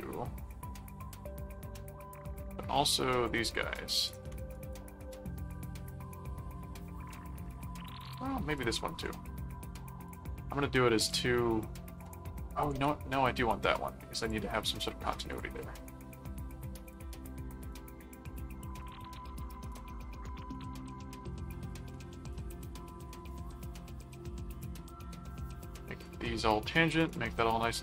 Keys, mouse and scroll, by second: 0.3 ctrl+4, 2.2 click, 3.8 click, 4.5 right click, 5.5 click, 8.0 click, 10.0 click, 11.0 click, 12.7 ctrl+z, 14.2 click, 15.3 click, 17.7 click, 18.8 click, 19.7 click, 20.5 click, 21.6 click, 22.3 ctrl+click, 23.1 ctrl+alt+click, 23.3 ctrl+alt+a, 23.9 click, 25.3 ctrl+click, 26.0 ctrl+alt+click, 26.6 ctrl+alt+a, 27.1 click, 27.7 ctrl+click.